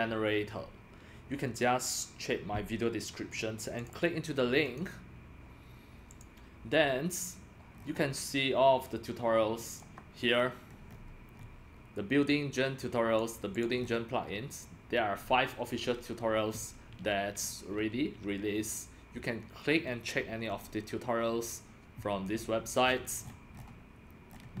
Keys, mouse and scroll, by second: 3.8 click, 4.6 click, 6.1 click, 7.7 scroll down 5, 9.6 click, 9.9-10.7 drag, 10.7 middle click, 10.7-11.0 scroll down 5, 10.8 middle click, 11.0 scroll up 4, 11.3 middle click, 11.3 scroll, 11.3 scroll up 2, 12.8-13.8 drag, 13.1 middle click, 13.1 scroll, 13.8-14.5 scroll down 5, 14.5 middle click, 14.5 scroll, 16.9-18.0 scroll down 6, 17.0 middle click, 18.0-18.6 scroll down 1, 18.6-19.7 scroll down 1, 19.7 middle click, 19.7-20.6 scroll down 1, 20.5 click, 20.6-22.2 drag, 22.8-24.6 scroll down 20.